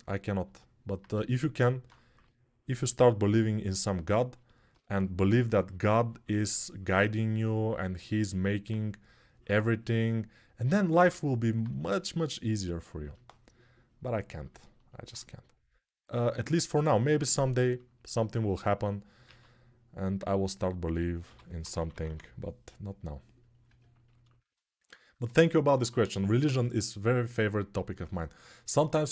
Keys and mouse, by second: 1.9 3, 11.5 1, 19.1 alt+q, 21.0 g, 21.4 ], 21.5 ], 21.8 ].